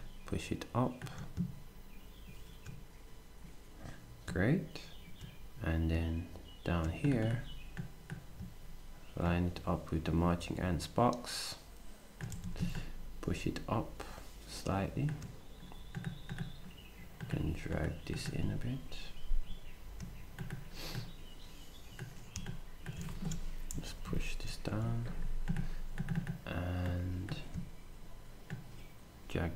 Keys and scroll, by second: 12.3 s, 23.7 alt+shift+Down, 24.7 s.